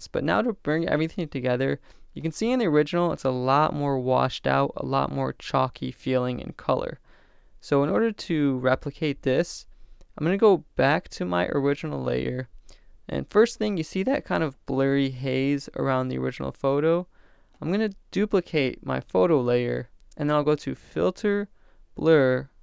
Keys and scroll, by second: 19.3 super+j.